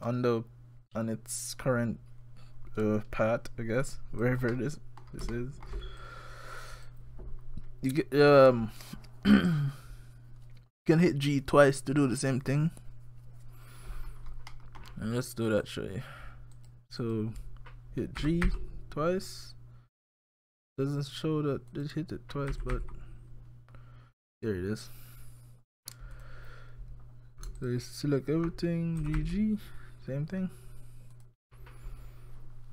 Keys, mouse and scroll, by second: 4.5 scroll up 1, 4.5 middle click, 5.3 shift+middle click, 6.0 click, 14.5 middle click, 15.6 click, 16.6 click, 17.0 click, 18.2 g, 22.5 g, 27.6 alt+click, 29.0 g.